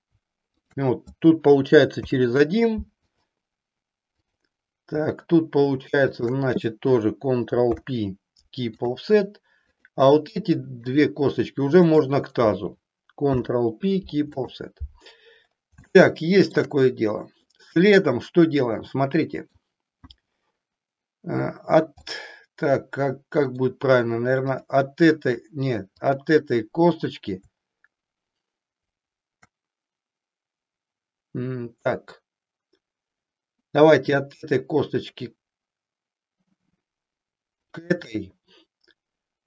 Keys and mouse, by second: 0.4 shift+click, 1.9 ctrl+p, 6.1 shift+click, 7.7 ctrl+p, 10.8 shift+click, 11.8 shift+click, 13.2 ctrl+p, 15.9 shift+middle click, 17.4-19.4 middle drag, 22.1-23.6 middle drag, 24.4 click, 37.8 shift+click.